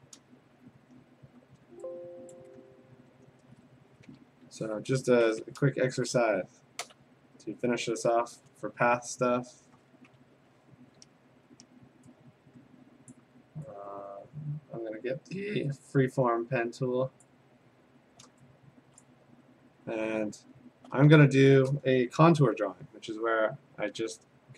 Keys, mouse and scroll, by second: 2.4 click, 2.7-3.4 ctrl+scroll, 5.9 ctrl+shift+n, 6.9 Return, 7.9 alt+BackSpace, 8.5 ctrl+BackSpace, 10.4 ctrl+], 11.3 a, 13.1 click, 17.3 click, 17.7-18.4 scroll, 18.5 middle click, 19.0 click, 19.3 Tab, 19.8 middle click, 19.9 middle click, 20.4 middle click, 20.6-20.9 scroll.